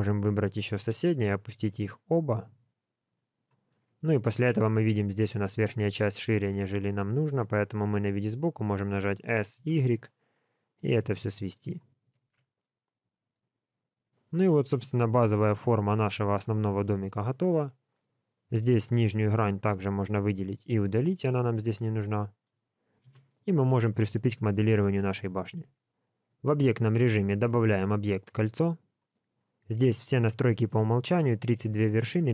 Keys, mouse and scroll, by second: 0.8 KP_1, 1.6 g, 3.6 middle click, 4.6 middle click, 6.5 click, 7.4 KP_3, 9.3 s, 12.2 alt+a, 12.6 middle click, 14.0-14.4 scroll down 2, 14.3 middle click, 18.0 middle click, 18.7-19.3 scroll up 2, 19.2 3, 19.5 click, 20.1 x, 21.2 middle click, 23.0 KP_1, 23.8-24.2 scroll down 1, 25.6 Tab, 27.3 shift+a.